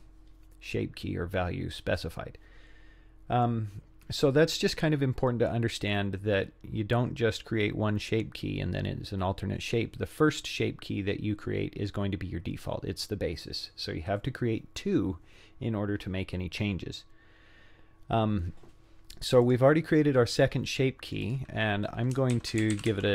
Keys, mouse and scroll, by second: 19.5 click, 21.1 click, 21.3-23.1 drag.